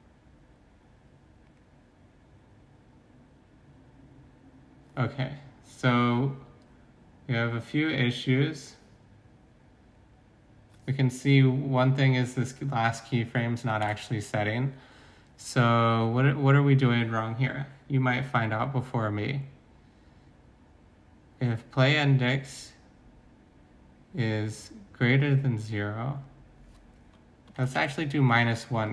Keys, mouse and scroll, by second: 13.8 alt+Tab.